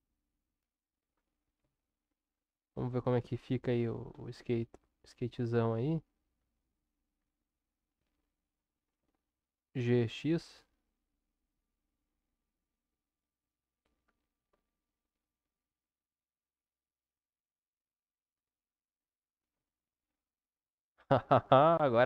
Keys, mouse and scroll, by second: 1.6 Tab, 2.9-3.9 middle drag, 4.7-6.4 middle drag, 7.2 Tab, 9.0 g, 19.5 Tab, 20.5-22.0 middle drag.